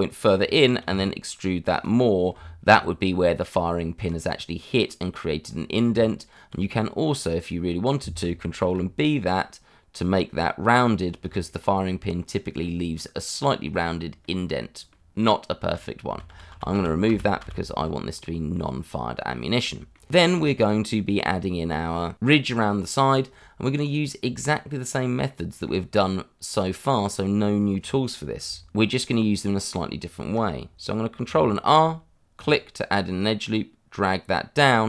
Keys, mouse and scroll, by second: 0.2 middle click, 0.8 e, 1.7 click, 2.0 scroll down 1, 2.3 Tab, 4.0 middle click, 5.4 scroll up 1, 5.8 Tab, 7.5 scroll up 1, 8.6 ctrl+b, 10.7 click, 11.0 scroll down 1, 11.2 Tab, 11.8 scroll down 1, 13.3 middle click, 14.2 scroll down 1, 16.0 ctrl+z, 18.1 scroll down 1, 18.5 middle click, 19.4 scroll down 1, 19.7 shift+middle click, 20.4 shift+middle click, 23.5-24.4 scroll up 1, 24.4-25.2 scroll down 1, 25.2 middle click, 26.8-27.2 scroll up 1, 31.2 ctrl+r, 32.3 click, 34.6 click.